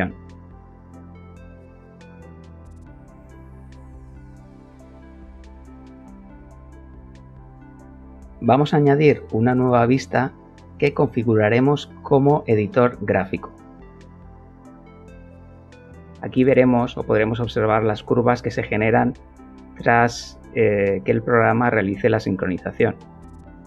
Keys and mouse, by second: 0.0 click, 1.1 click, 2.2 click, 3.8 middle click, 7.5 click, 9.3-10.8 drag, 12.0 click, 14.8 click, 18.2 middle click, 19.3 shift+middle click, 21.4 a.